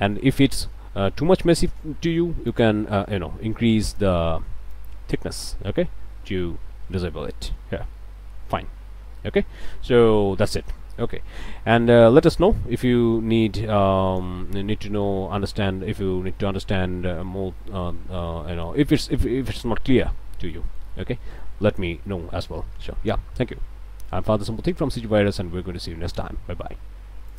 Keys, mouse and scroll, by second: 1.1 middle click, 2.5 click, 3.9 click, 4.7-7.7 drag, 7.9-9.6 middle drag, 9.6 scroll down 1, 9.8 middle click, 10.2 Tab, 10.4 middle click, 11.0 middle click, 12.4 middle click, 12.9-14.4 drag, 14.5 click, 15.1 Tab, 15.5 scroll up 1, 15.9-18.4 middle drag, 19.2 scroll down 1, 19.6 click, 19.9 middle click, 20.2 scroll up 1, 20.4 scroll down 1, 20.5 middle click, 21.2 middle click, 21.2 click, 27.3 click.